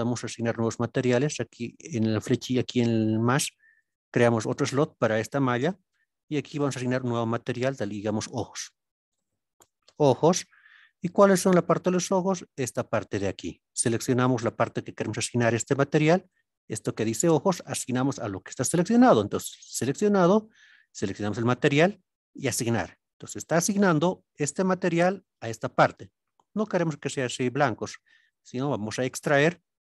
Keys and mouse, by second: 3.8 click, 6.5 click, 7.6-10.6 drag, 16.2 click, 21.1 click, 23.5 click, 24.4 click, 28.2 click.